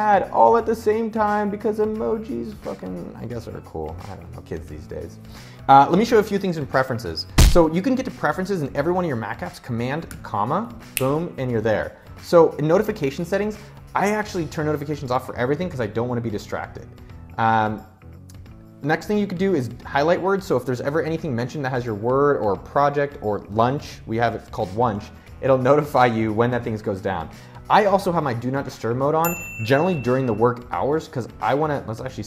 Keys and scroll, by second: 9.6 super+,.